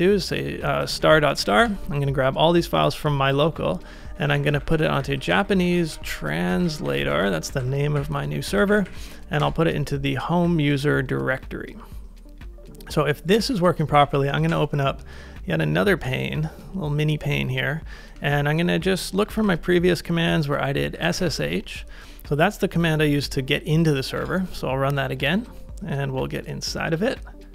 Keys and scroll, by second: 0.4-1.9 typing, 4.1-7.5 typing, 8.5 BackSpace, 8.7 shift+`, 8.8 /, 9.4 Return, 14.0 ctrl+a, 14.5 shift+', 19.3 ctrl+r, 20.7-21.8 typing, 24.2 Return.